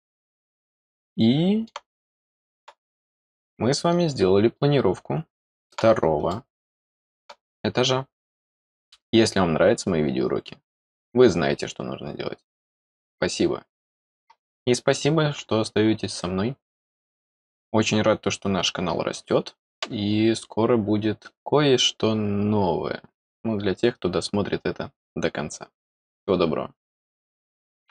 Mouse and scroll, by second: 2.0 middle click, 3.0-5.7 middle drag, 5.9 middle click, 6.2 middle click.